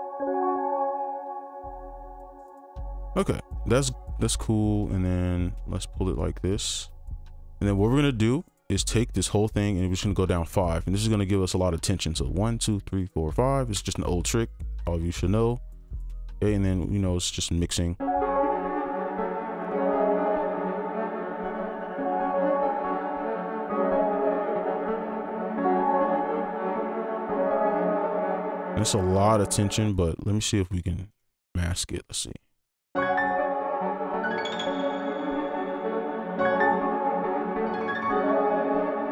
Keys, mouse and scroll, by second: 3.5 ctrl+click, 4.7 shift+click, 7.1-7.5 scroll down 2, 8.7 shift+click, 10.3-12.2 scroll down 1, 12.3-13.3 shift+Down, 17.8 right click, 20.8 scroll down 1, 21.8 space, 25.2 space, 28.2 space, 29.9 double click, 32.9 space, 38.8 space.